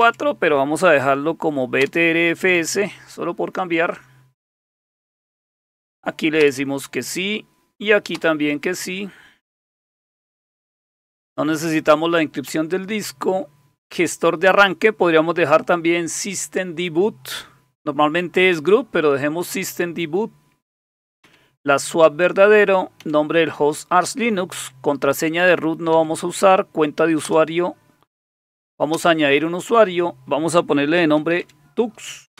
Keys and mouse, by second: 0.0 Up, 1.8 Return, 6.4 Return, 8.2 Return, 12.5 Down, 21.2 Down, 23.0 Down, 24.6 Down, 25.9 Down, 27.3 Return, 28.9 Return, 30.8-31.9 typing.